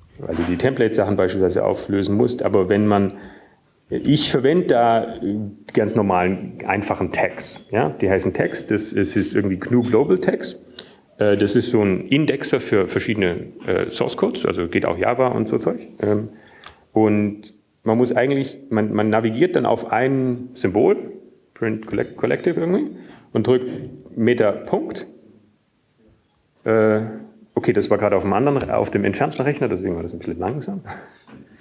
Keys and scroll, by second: 2.4-2.9 typing, 3.3 Down, 3.9 Down, 5.0 Down, 6.5 Down, 6.5 Up, 7.7 Right, 7.7 Down, 9.1 Up, 9.1 Down, 27.5 alt+..